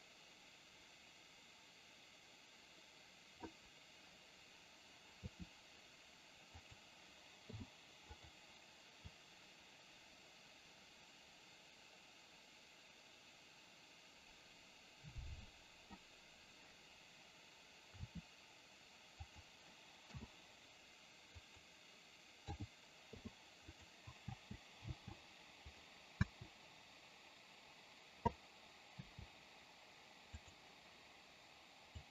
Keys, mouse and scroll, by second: 9.2-16.1 drag, 25.8 click, 30.5 click.